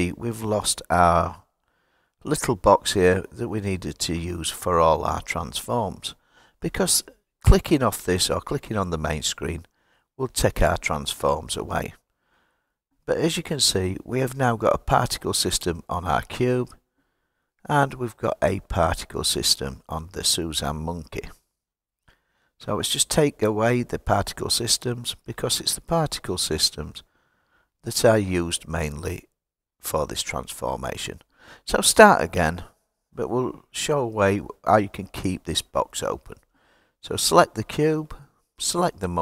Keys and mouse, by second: 5.1 click, 8.0 click, 10.0 click, 13.2 click, 19.2 click, 24.4 click, 26.0 click, 27.4 click, 30.0 drag, 30.8 click, 32.9 click, 34.3 click, 37.0 click, 38.6 shift+click.